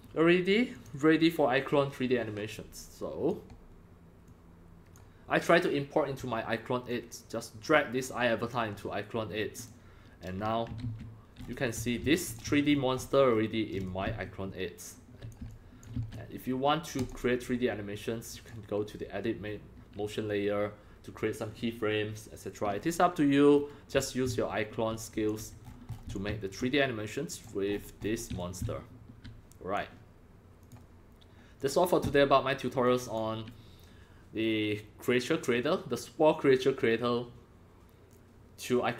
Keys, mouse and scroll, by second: 0.7 click, 2.8 click, 4.3 click, 6.9 click, 9.7-10.8 drag, 10.8 ctrl+g, 11.4-11.8 scroll up 5, 11.5-12.5 typing, 11.8 click, 12.6-13.3 shift+scroll up 8, 13.3 shift+middle click, 13.8 x, 13.9-15.3 drag, 14.6 c, 15.5 click, 15.5 x, 16.0 c, 17.0 click, 18.3 click, 22.7 scroll down 5, 23.0-23.5 scroll, 23.5 scroll up 4, 23.9 x, 24.0-25.6 drag, 24.3 c, 25.6 scroll, 25.6 scroll down 2, 25.7 scroll, 25.9 scroll down 7, 26.1-26.6 drag, 26.3 c, 27.3 click, 27.7-28.1 scroll up 8, 28.1 middle click, 28.1 scroll, 28.1 scroll up 4, 28.3-29.7 typing, 28.4-29.8 drag, 30.6 click, 31.6 click, 32.8 click.